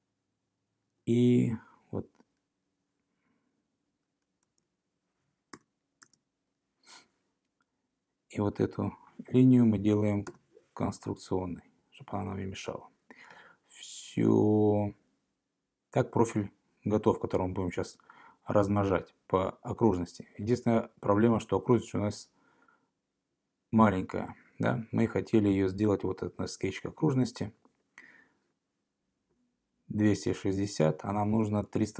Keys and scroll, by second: 0.9 Escape, 4.5 Tab, 5.6 Return, 6.1 Return, 10.3 x, 31.8 Left.